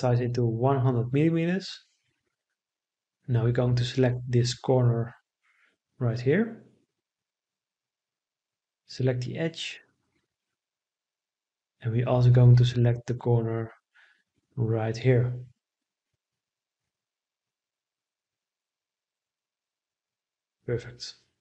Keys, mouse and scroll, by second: 0.0 Return.